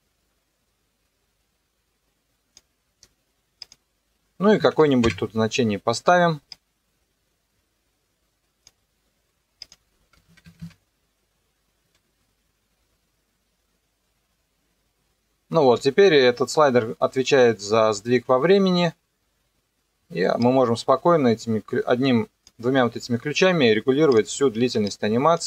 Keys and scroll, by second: 4.5 KP_0, 4.8 KP_1, 5.0 KP_Enter, 10.2 KP_0, 10.4 KP_3, 10.6 KP_Enter, 11.8 KP_0, 15.6 space.